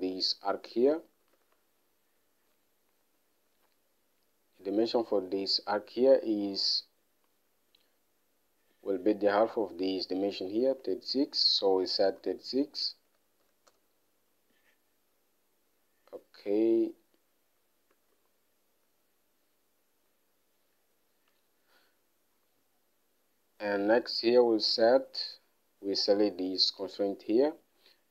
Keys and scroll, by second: 1.8 alt+Tab, 11.2 alt+Tab, 12.2-13.8 typing, 14.1 Return, 18.3 Escape.